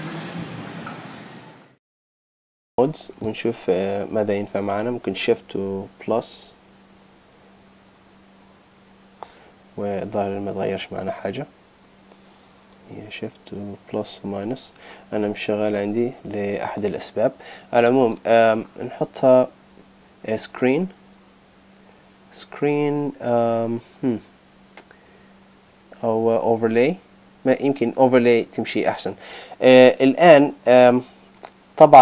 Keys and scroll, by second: 5.4 shift++, 6.0 shift++, 6.4 shift++, 6.7 shift++, 13.6-16.5 typing.